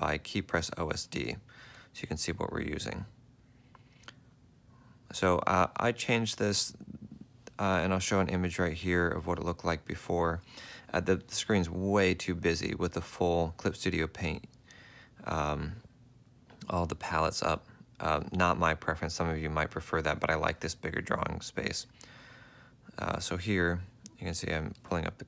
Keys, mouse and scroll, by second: 0.1 F5, 3.1 F5, 3.5 F5, 4.2 F5, 5.1 F4, 6.3 F4, 22.2 F3, 23.3 F6.